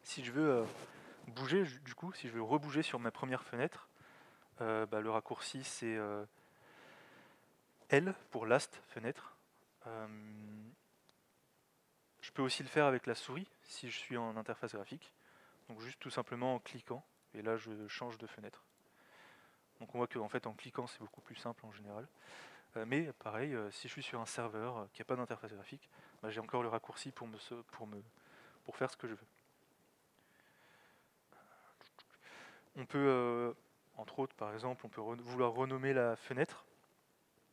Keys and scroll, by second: 6.3 alt+x, 8.1 l.